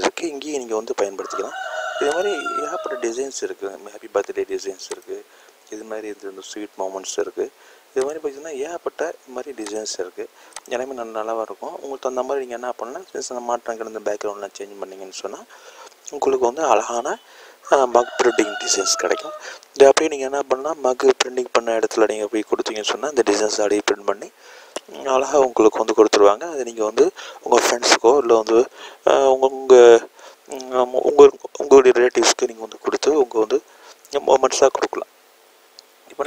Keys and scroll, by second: 15.2 i.